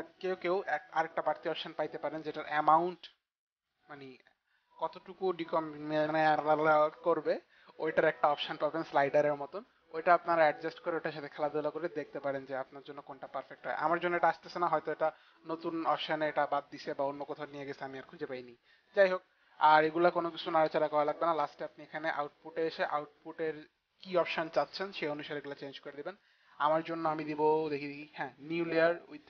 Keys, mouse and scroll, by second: 24.7 click.